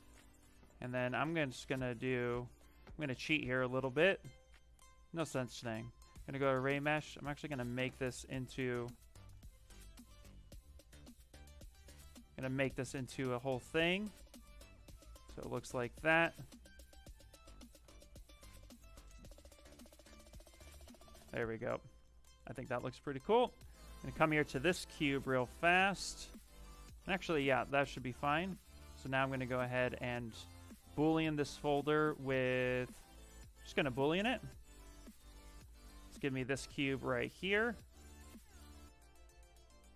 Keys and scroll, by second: 17.0 q, 17.7 shift+f, 25.9 s, 36.2 shift+f.